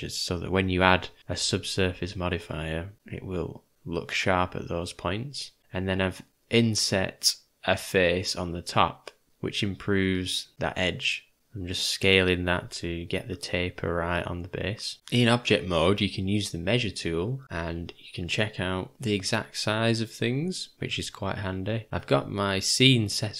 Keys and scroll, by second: 2.9 `, 2.9 ", 3.8 `, 6.8 s, 9.3 /, 10.1 Home, 13.5 ctrl+z, 14.0 s, 19.2 Delete.